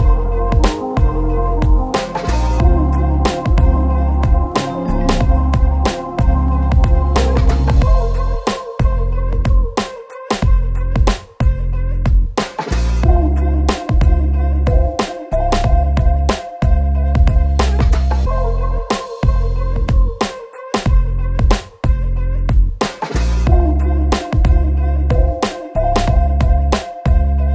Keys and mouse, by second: 0.8 e, 1.1 Tab, 1.2 a, 1.2 a, 1.8 ctrl+z, 2.0 ctrl+z, 2.2 Tab, 2.4-5.6 typing, 2.9 Tab, 2.9 alt+x, 3.5 shift+click, 3.7 Tab, 8.7 s, 9.0 click, 9.6 Tab, 9.6 click, 9.9 Tab, 9.9 shift+z, 10.2 click, 11.5 Tab, 11.6 ctrl+r, 11.8 middle click, 12.1 click, 12.8 click, 13.1 ctrl+z, 13.2 ctrl+r, 13.5 click, 14.1 shift+click, 14.3 middle click, 14.3 shift+z, 14.5 click, 15.3 Tab, 15.3 click, 15.3 a, 15.4 a, 15.6 middle click, 15.8 middle click, 16.0 Tab, 16.2 ctrl+click, 16.3 ctrl+a, 16.5 Tab, 16.6 ctrl+shift+click, 16.8 ctrl+b, 17.1 Tab, 17.1-19.1 typing, 17.4 ctrl+click, 18.4 shift+middle click, 18.9 shift+middle click, 19.3 shift+middle click, 20.9 ctrl+j, 21.9 shift+click, 22.1 middle click, 22.1 shift+d, 22.2 r, 22.8 shift+click, 22.9 middle click, 23.0 a, 23.1 a, 23.6 shift+click, 24.6 shift+click, 24.7 a, 24.9 Tab, 24.9 ctrl+b, 24.9 ctrl+click, 26.0 Tab, 26.2 Tab, 26.4 a, 26.6 ctrl+shift+click, 26.6 q, 26.9 Tab, 27.1 a, 27.1 alt+x, 27.2 middle click, 27.4 Tab, 27.4 click.